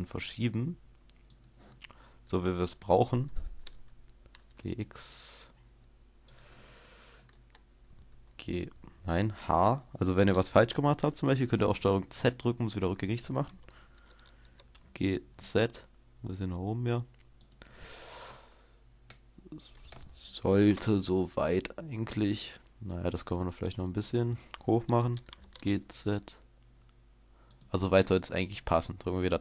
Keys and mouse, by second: 3.5-6.9 drag, 3.5 g, 8.2 h, 11.7-14.9 middle drag, 12.4 ctrl+z, 14.5 g, 17.7-19.1 drag, 19.1-20.7 middle drag, 20.7 KP_0, 21.4-23.9 middle drag, 25.4 g, 25.7-27.7 middle drag, 28.3 Tab, 28.9 click, 29.3 click.